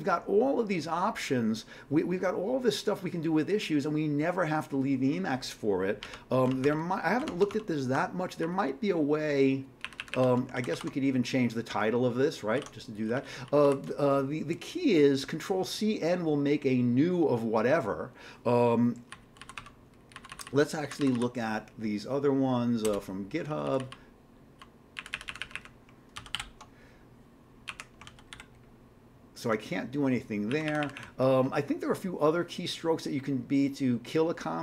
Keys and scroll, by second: 6.1 alt+Tab, 6.5 alt+Tab, 6.6 alt+Tab, 7.3 alt+Tab, 8.4 Down, 8.6 Down, 9.8 Up, 10.0 Up, 10.1 Up, 10.6 ctrl+c, 10.8 ctrl+e, 12.6 ctrl+g, 13.0 Down, 13.2 Down, 13.3 Down, 13.5 Down, 19.1 Down, 19.6 q, 20.1 Down, 20.3 Down, 20.5 Down, 20.6 Down, 20.8 Down, 21.0 Down, 21.1 Down, 22.8 Return, 23.5 Down, 23.6 Down, 23.8 Down, 23.9 Down, 24.5 Down, 25.0 Up, 25.1 Up, 25.3 Up, 25.4 Up, 26.2 ctrl+c, 26.3 ctrl+k, 27.7 Up, 28.1 ctrl+c, 28.3 ctrl+k, 30.5 Up, 30.7 Up, 30.8 Up, 31.0 Up.